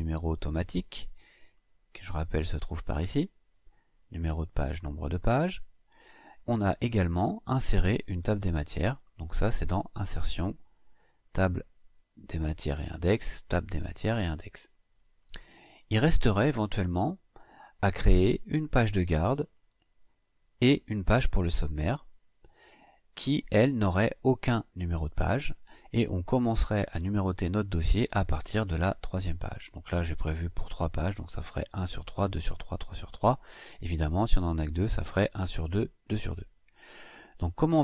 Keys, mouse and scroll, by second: 1.2 click, 5.8 click, 6.2 scroll down 2, 6.3-7.3 scroll up 6, 7.3 scroll down 2, 7.4 scroll up 2, 8.0 scroll up 2, 8.7 click, 11.0 click, 15.0 click, 19.2 click.